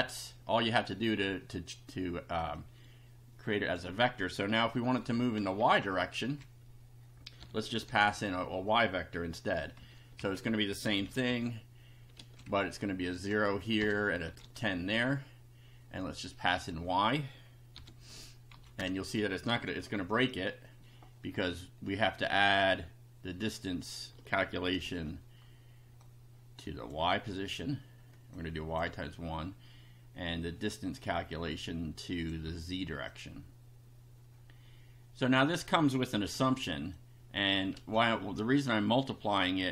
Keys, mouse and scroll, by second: 2.6-3.9 drag, 5.7 Home, 6.2 Down, 7.4 y, 7.9 =, 9.8 Up, 10.2 shift+End, 10.9 ctrl+c, 11.0 ctrl+Down, 12.1 ctrl+v, 12.5 ctrl+Left, 13.8 BackSpace, 14.0 Right, 14.4 1, 16.6 click, 17.7 y, 18.0 Up, 18.5 End, 18.8 Return, 19.6 F5, 22.6-23.7 drag, 24.8 ctrl+c, 26.0-27.0 drag, 27.1 ctrl+v, 28.3 click, 28.8 1, 31.0-32.4 drag, 33.1-35.7 drag, 36.1 ctrl+c, 37.0 click, 37.8 ctrl+v.